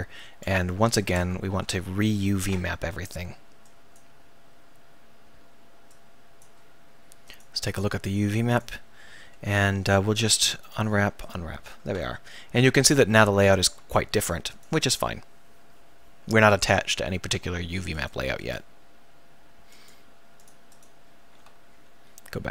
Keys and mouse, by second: 1.2 Tab, 1.6 a, 1.8 a, 3.6-10.7 drag, 11.3-13.7 drag, 14.0 ctrl+s, 17.9-22.5 right drag.